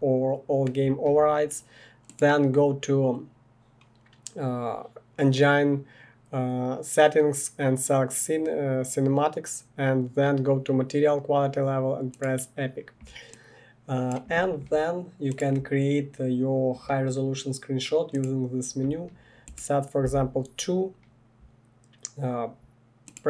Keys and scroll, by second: 20.0 2.